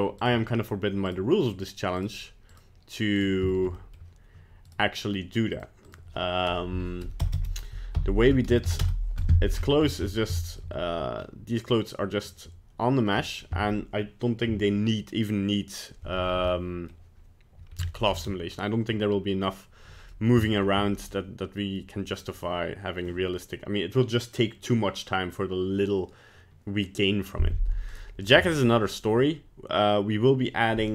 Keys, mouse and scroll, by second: 0.2 right click, 1.1 right click, 2.0 right click, 2.5 right click, 3.2 right click, 3.5 shift+middle click, 3.8 middle click, 4.7 right click, 5.5 click, 7.3 BackSpace, 9.5-10.3 scroll down 11, 10.1 middle click, 10.4 shift+middle click, 11.2 middle click, 13.3 middle click, 16.1-16.7 scroll down 3, 16.5 middle click, 18.0 shift+middle click, 20.1 middle click, 20.5 shift+middle click, 21.1 middle click, 21.8 middle click, 22.1 middle click, 27.9 right click, 28.2 right click.